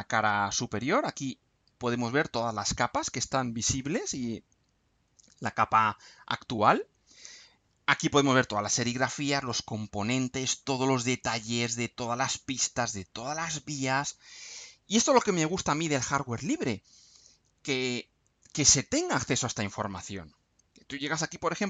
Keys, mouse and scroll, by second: 7.9-8.4 scroll up 2, 9.4 scroll down 2, 10.0 scroll down 2, 10.6-11.0 scroll down 2, 14.2-14.6 scroll up 2, 19.8-20.5 scroll up 1.